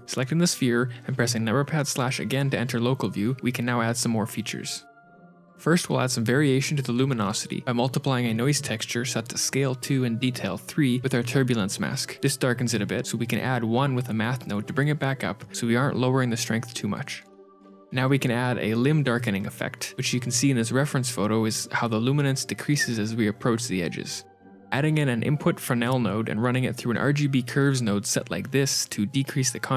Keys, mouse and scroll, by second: 0.1 KP_Divide, 1.9 z, 2.6 z, 7.5 shift+a, 8.9 click, 10.3 shift+click, 11.9 click, 12.9 shift+a, 14.1 click, 14.1 h, 14.3 click, 15.9 click, 17.2 click, 18.6 click, 19.4 g, 20.3 shift+middle click, 24.2 middle click, 24.2 shift+a, 27.7 click, 28.5 ctrl+shift+click.